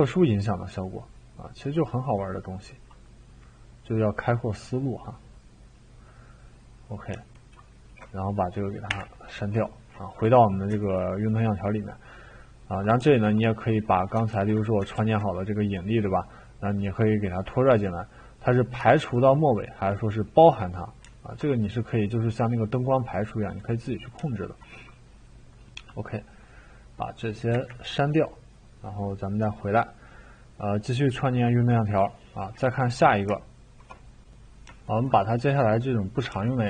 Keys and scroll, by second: 8.9 Delete, 14.3 ctrl+z, 14.9 ctrl+z, 27.5 Delete.